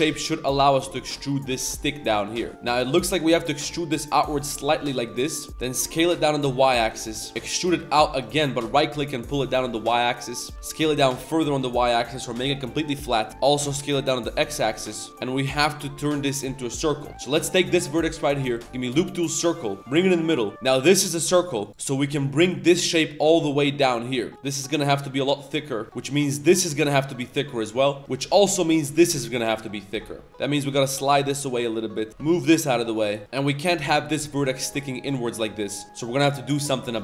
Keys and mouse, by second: 0.0 z, 0.1 shift+middle click, 1.5 g, 2.3 z, 2.5 click, 3.3 e, 5.4 click, 5.5 shift+s, 6.1 s, 10.5 shift+s, 12.7 middle click, 13.2 middle click, 14.8 middle click, 15.1 z, 16.5 middle click, 16.8 middle click, 17.1 middle click, 18.4 w, 19.8 middle click, 19.8 g, 20.2 middle click, 20.5 3, 20.7 middle click, 21.1 middle click, 21.5 Tab, 21.5 middle click, 21.7 3, 21.7 1, 21.7 KP_7, 21.7 z, 22.4 shift+middle click, 22.8 r, 23.3 g, 24.3 Tab, 24.3 ctrl+r, 24.3 ctrl+z, 24.3 s, 25.8 z, 25.9 middle click, 26.3 middle click, 27.6 middle click, 31.3 middle click, 32.1 g, 32.9 click, 33.2 click, 33.2 z, 33.2 a, 33.5 drag, 33.9 drag, 34.2 click, 34.5 middle click, 34.7 z, 35.0-35.4 middle drag, 35.5 middle drag, 35.5 z, 35.8 shift+middle drag, 36.2 middle click, 36.5 middle click.